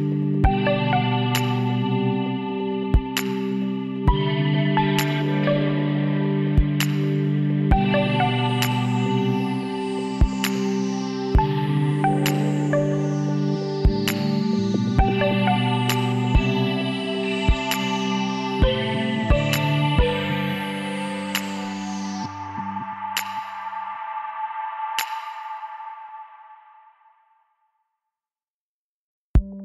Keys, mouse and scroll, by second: 4.4-5.8 middle drag, 5.8 s, 6.0 middle click, 10.8-12.8 middle drag, 15.4 shift+z, 17.0 shift+z, 19.0 KP_1, 22.7-24.3 middle drag, 23.1 KP_1, 24.5 e, 28.1-29.6 drag.